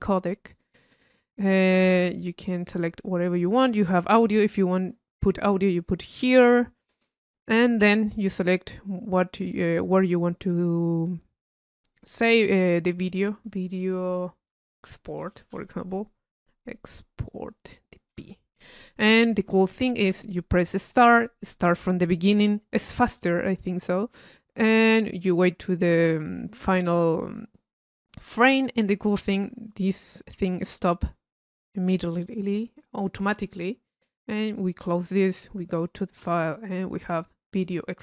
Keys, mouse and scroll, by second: 2.1 click, 2.8 click, 11.0 click, 17.2 click, 17.8 click, 18.2 p, 21.1 click, 21.4 click, 34.6 click.